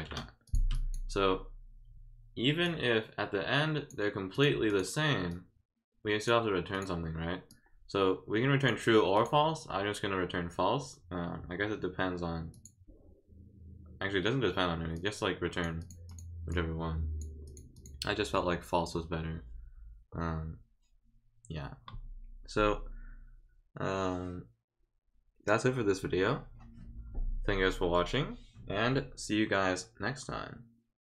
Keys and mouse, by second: 0.4 click, 0.7 click, 2.6-3.9 drag, 4.3 click, 4.7 click, 5.3 click, 6.7 click, 7.5-8.6 drag, 9.1 click, 12.5 click, 14.9 click, 15.8 click, 16.1 click, 16.5 click, 17.4 click, 17.7 click.